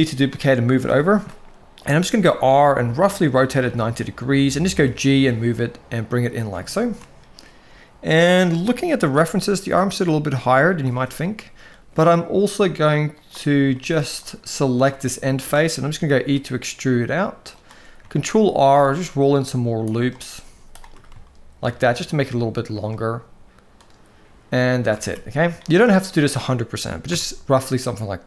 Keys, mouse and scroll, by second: 0.8 shift+middle click, 1.7 r, 4.4 g, 6.5 shift+middle click, 9.1 g, 10.7-11.1 shift+middle drag, 13.0 click, 13.5 shift+middle click, 14.1 click, 14.8 shift+middle click, 15.9 e, 17.8 ctrl+r, 20.2 z, 21.0 shift+middle click, 22.5 click, 23.5 click, 24.4 shift+middle click, 24.7 alt+a, 25.4 shift+middle click, 26.9 Tab.